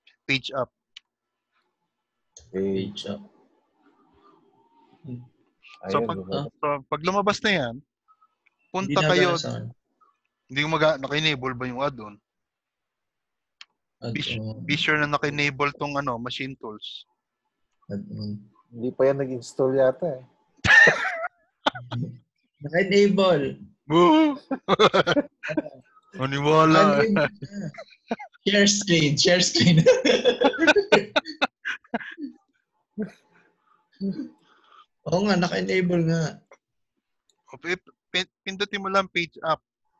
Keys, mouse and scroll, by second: 1.0 Page_Up, 13.6 F4.